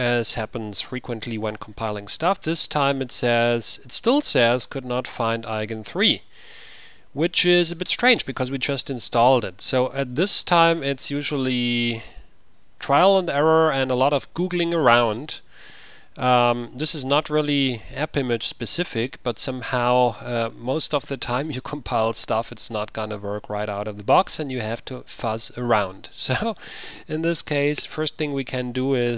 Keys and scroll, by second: 28.4 ctrl+c.